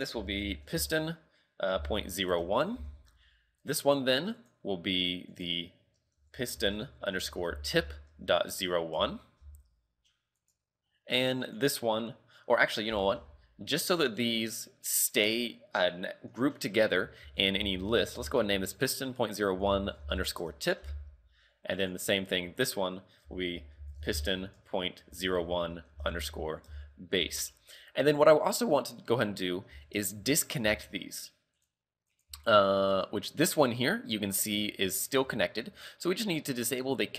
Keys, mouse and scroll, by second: 3.7 right click, 4.4 right click, 5.4 click, 10.4 right click, 11.5 click, 14.1 right click, 15.0 click, 21.8 right click, 22.7 click, 30.4 shift+middle click, 30.7 g, 32.2 right click, 32.3 g, 35.4 shift+middle click.